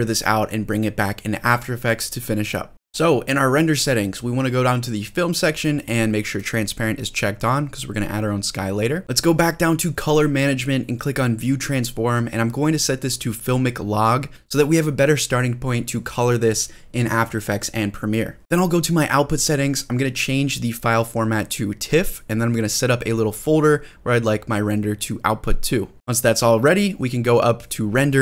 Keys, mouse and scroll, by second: 2.7-3.3 scroll down 3, 5.7 click, 8.6 scroll down 1, 9.3-10.2 scroll down 3, 10.2-11.2 drag, 16.4-18.2 drag, 19.1 click, 20.2-21.6 scroll up 1, 21.6-22.1 scroll down 2, 22.1-23.8 drag, 25.9-26.7 scroll down 1, 26.7-28.2 drag.